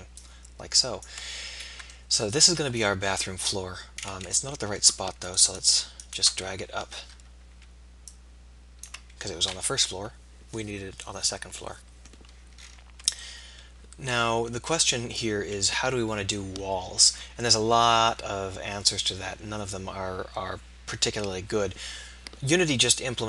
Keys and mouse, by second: 1.7 middle click, 2.4 middle click, 5.2-8.4 drag, 7.0 KP_3, 9.7 KP_7, 13.9 middle click.